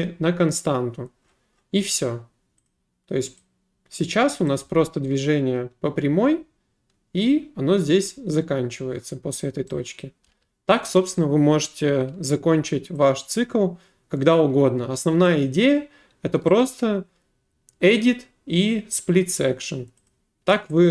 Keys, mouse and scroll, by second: 0.0 click, 2.7 click, 4.5 click, 4.6 space, 10.3 w, 11.0 right click, 15.3 click, 16.6 right click, 20.1 click.